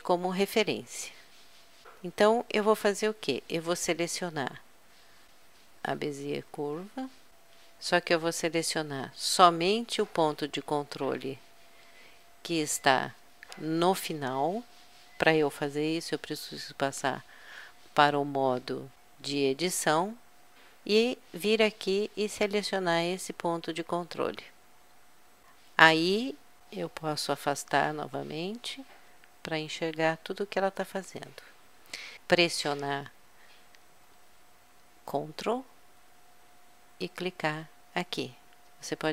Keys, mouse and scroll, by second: 0.3-0.8 middle drag, 0.9 middle click, 1.1 middle click, 1.3 middle click, 1.5 middle click, 2.4-3.1 middle drag, 4.6 middle click, 4.9 click, 5.8-7.4 drag, 7.4 KP_Add, 8.3 KP_Add, 10.4 middle click, 10.6 middle click, 10.8 middle click, 11.0 middle click, 16.3 Tab, 27.4 KP_Subtract, 27.9 KP_Subtract, 28.5 KP_Subtract, 37.2-38.8 drag.